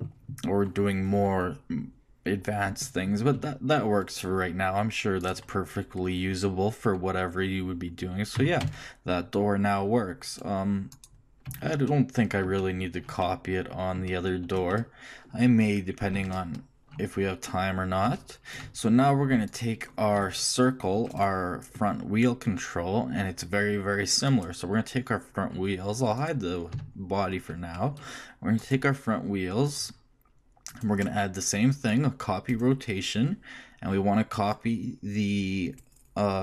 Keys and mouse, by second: 3.3 r, 8.4 r, 19.5 shift+click, 25.7 middle click, 26.7 h, 29.9 right click, 32.6-34.3 middle drag.